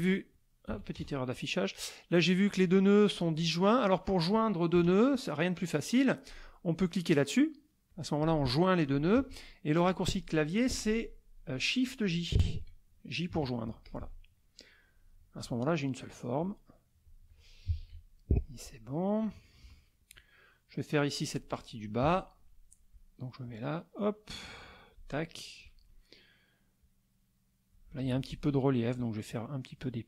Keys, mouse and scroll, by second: 0.7 KP_Subtract, 0.9 KP_Add, 1.5 middle click, 2.5 click, 4.7 KP_Add, 5.4 middle click, 7.9 click, 9.2 ctrl+z, 9.4 ctrl+click, 13.4 shift+j, 13.8 shift+click, 15.0 middle click, 16.4 click, 17.3 click, 17.7 shift+j, 19.2 KP_Subtract, 19.9 middle click, 19.9-20.4 scroll down 2, 20.5 middle click, 20.5-21.0 scroll down 2, 22.0 F6, 23.4-25.6 drag, 26.8-27.9 drag, 28.0 ctrl+z, 28.5 ctrl+click, 29.4 click.